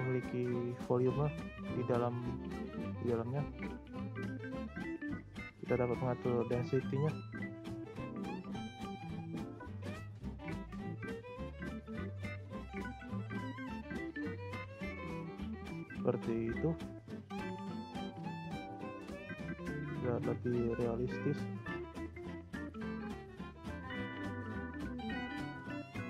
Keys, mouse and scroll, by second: 1.4 scroll up 1, 2.4-3.5 scroll up 2, 3.5-6.6 drag, 8.4-11.4 drag, 12.6-15.6 drag, 15.9-16.8 shift+scroll up 4, 15.9-16.3 shift+middle drag, 16.8-17.6 middle drag, 17.6 click, 18.2-18.7 middle drag, 18.7-19.0 scroll down 3, 19.0-19.3 shift+middle drag, 19.3-19.8 scroll up 6, 20.3-20.7 scroll down 2, 20.7-21.8 middle drag, 21.8-24.8 drag.